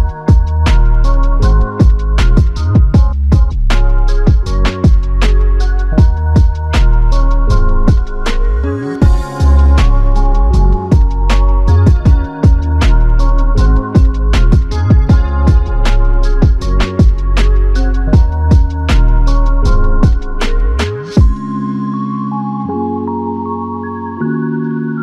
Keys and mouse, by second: 1.6 alt+click, 3.4 shift+click, 5.4 shift+click, 7.1 alt+shift+click, 7.9 shift+click, 10.6 shift+click, 10.8 shift+click, 11.7 shift+l, 15.0 ctrl+alt+click, 15.8 alt+click, 17.2 ctrl+alt+click, 19.1 alt+click, 21.0 ctrl+alt+click, 24.1 ctrl+alt+click.